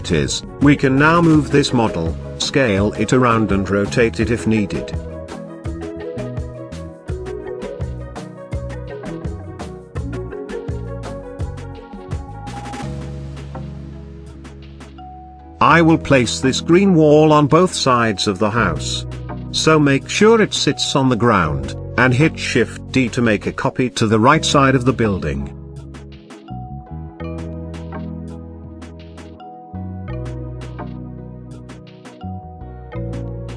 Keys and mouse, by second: 0.8 g, 1.3 shift+z, 2.8 click, 3.4-4.8 middle drag, 5.5-6.0 shift+middle drag, 6.4 s, 8.7 s, 9.1 click, 9.5-9.8 middle drag, 10.5 g, 11.7 click, 14.3 g, 14.6 x, 15.4 drag, 15.8-16.1 middle drag, 16.4 shift+middle click, 17.7-18.0 shift+middle drag, 18.8 KP_Decimal, 19.5-20.2 middle drag, 20.6-20.9 shift+middle drag, 21.3 g, 21.8 y, 23.8 click, 24.8-26.1 middle drag, 26.4 KP_0, 32.2-32.6 middle drag, 32.9 shift+middle drag.